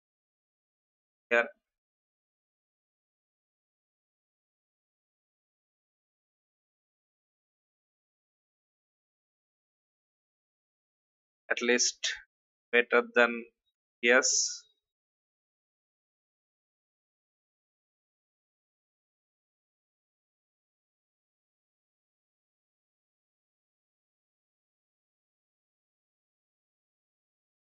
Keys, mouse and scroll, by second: 1.0 alt+scroll down 1, 2.1 click, 3.3 shift+Right, 4.0 shift+Left, 5.3 shift+Left, 6.9-7.3 alt+scroll down 1, 8.0 click, 14.2 Delete, 15.4 click, 17.3 alt+scroll up 1, 18.3-19.4 drag, 22.2 alt+shift+click, 24.4 click, 24.9-25.3 alt+scroll down 1, 25.8 click, 27.0-27.8 alt+drag.